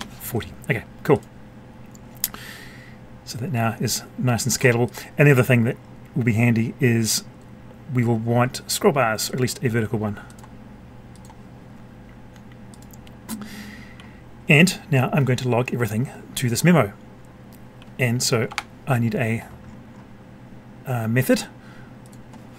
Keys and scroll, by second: 18.4 F12.